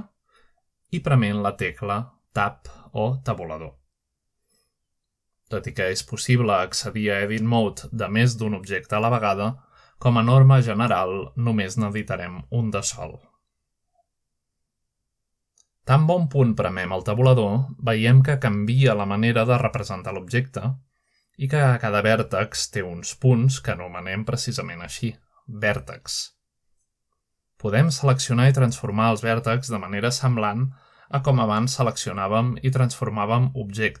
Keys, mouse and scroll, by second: 0.0 click, 0.9 shift+middle drag, 1.6 shift+middle click, 3.0 Tab, 7.1 click, 10.2 Tab, 11.0 shift+middle click, 13.1-13.6 drag, 13.8 Tab, 14.4 Tab, 15.2 shift+click, 16.1 Tab, 16.9 Tab, 17.3 click, 18.1-34.0 Tab, 18.8 shift+middle click, 20.4 middle click, 20.7-21.5 scroll up 1, 21.4 middle click, 23.8 click, 24.8 click, 27.4 click, 28.4 click, 29.3 click, 30.0-34.0 z, 31.0-32.6 drag, 33.2 middle click.